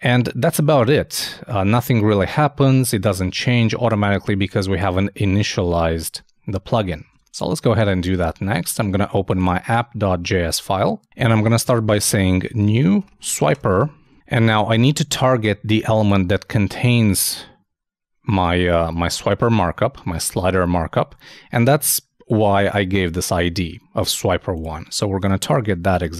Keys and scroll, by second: 7.1 super+Tab, 12.5-13.5 typing, 25.2 shift+3.